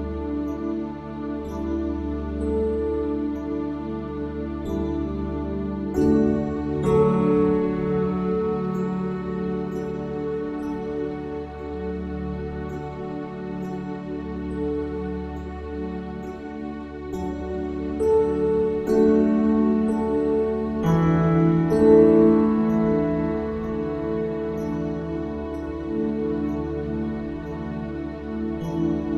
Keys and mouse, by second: 26.0 click.